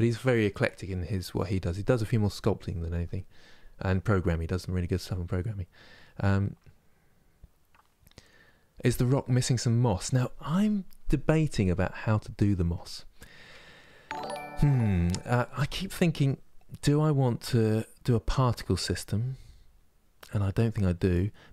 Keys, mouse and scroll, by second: 9.0-20.3 middle drag.